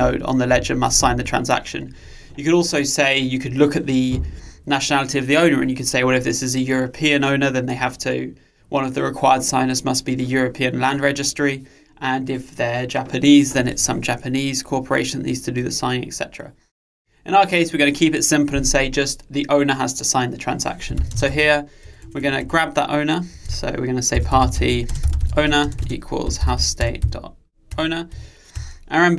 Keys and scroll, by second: 26.9 Return.